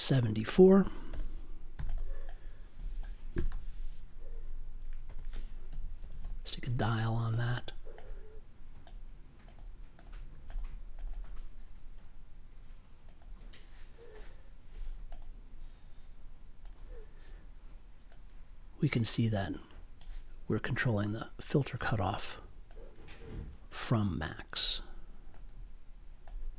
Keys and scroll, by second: 1.0 7, 3.3 BackSpace, 5.0-6.7 typing.